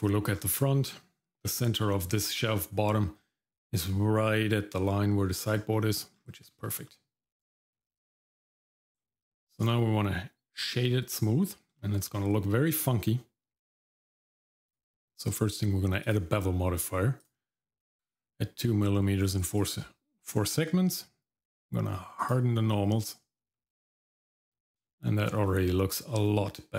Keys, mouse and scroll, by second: 0.4-0.9 scroll up 2, 0.9 middle click, 5.3-5.7 scroll down 2, 5.7 middle click, 6.1-6.5 scroll down 1, 6.5 shift+middle click, 6.9 middle click, 7.4 middle click, 7.7-8.3 scroll up 1, 8.3 middle click, 8.5-9.0 scroll down 1, 9.0 middle click, 9.6-10.7 right drag, 11.8 shift+middle click, 12.1-13.3 scroll up 2, 14.7-16.2 drag, 17.2 click, 19.2 click, 19.4 click, 19.6 click, 20.9 click, 22.2 click, 24.5 scroll down 1, 24.8 shift+middle click, 25.4 middle click, 26.1 middle click.